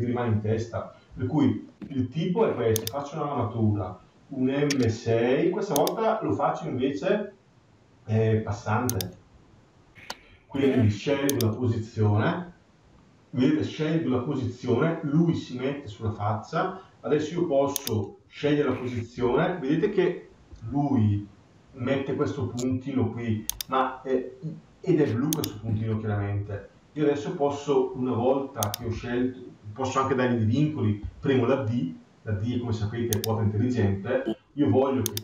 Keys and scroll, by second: 20.4 Escape, 28.7 Escape.